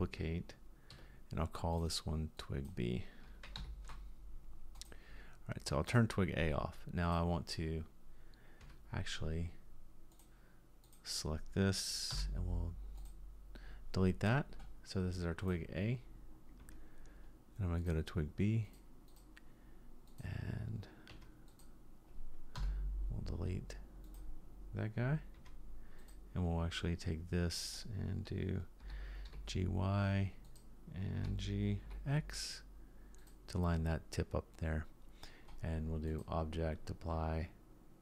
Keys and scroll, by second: 8.6 Tab, 12.1 Delete, 16.6 Tab, 21.1 Tab, 22.6 Delete, 25.4 Tab, 28.8 g, 31.2 g.